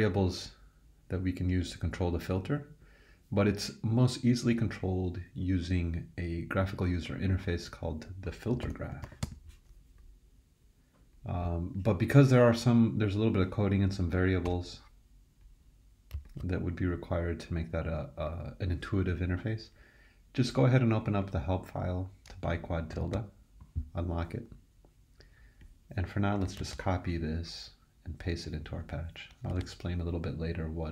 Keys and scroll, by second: 8.3-9.7 typing, 14.4 BackSpace, 23.0 super+e, 26.6 super+c, 29.5 super+v.